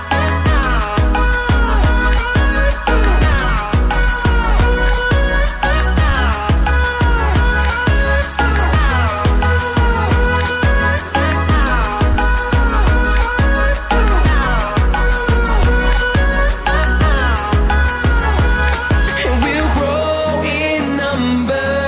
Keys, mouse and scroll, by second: 7.4 scroll up 1, 7.9 click, 12.1 ctrl+c, 12.3 ctrl+v, 13.2 click, 17.1 click, 17.2 ctrl+a, 17.6-21.3 typing, 21.7 click.